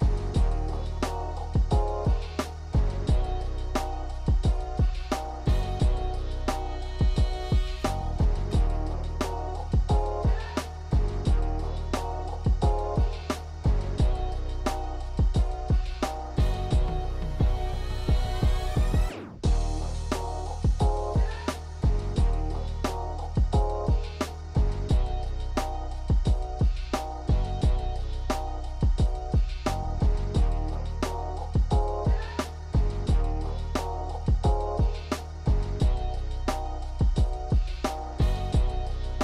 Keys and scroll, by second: 6.6 KP_1, 8.4 ctrl+j, 9.3 shift+d, 10.1 Tab, 10.2 a, 12.8 Tab, 16.2 g, 20.0 ctrl+j, 22.2 Tab, 23.1 shift+z, 24.5 m, 28.3 m, 33.8 ctrl+Delete, 38.8 ctrl+z.